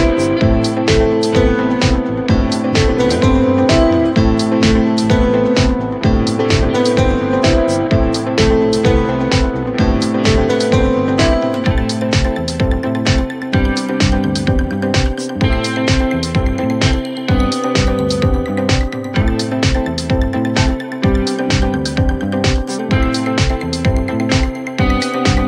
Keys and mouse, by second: 0.5 alt+click, 3.2-5.0 alt+right drag, 5.2 alt+click, 5.4 alt+x, 6.0 click, 8.6 click, 9.3 r, 10.0-12.5 drag, 12.8 alt+click, 13.4 alt+click, 14.3 3, 14.6 click, 15.3 Delete, 17.3 alt+click, 18.6 alt+middle click, 18.9 alt+click, 23.1 click, 24.0 alt+middle drag, 24.5 alt+middle click, 24.9 alt+click, 25.4 alt+click.